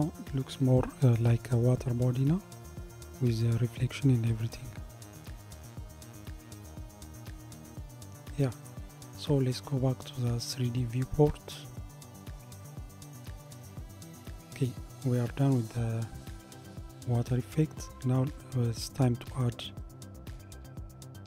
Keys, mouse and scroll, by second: 9.6-21.2 drag.